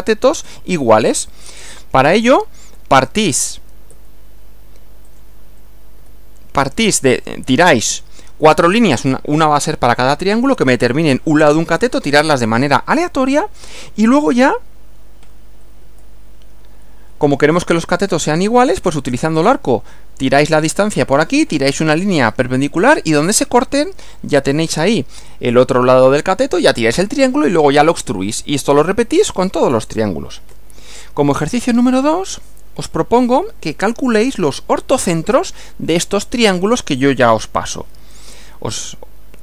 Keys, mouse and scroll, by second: 1.6 Right, 3.1 click, 3.9 Right, 5.0 click, 6.0 Right, 15.8 Right, 24.7 Right, 30.5 Right, 37.8 Right.